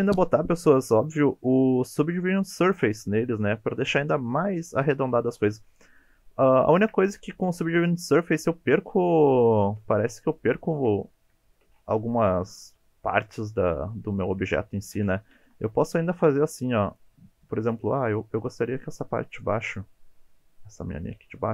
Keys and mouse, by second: 6.6 shift+middle drag, 7.4 shift+middle drag, 8.8 shift+middle drag, 9.6 shift+middle drag, 10.0 Tab, 10.6 shift+middle drag, 11.4 shift+middle drag, 12.5 shift+middle click, 14.2 shift+middle click, 15.3 2, 16.9 alt+click, 18.0 alt+shift+click, 19.4 alt+shift+click, 19.8 middle click.